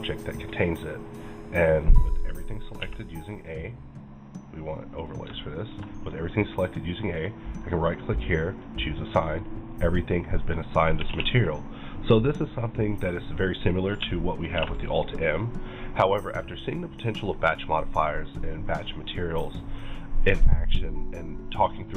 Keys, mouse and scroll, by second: 2.8 a, 4.8 click, 5.4 shift+middle click, 7.6 right click, 8.5 click, 10.5-14.6 middle drag, 11.1 alt+a, 13.4 click, 14.6 alt+m.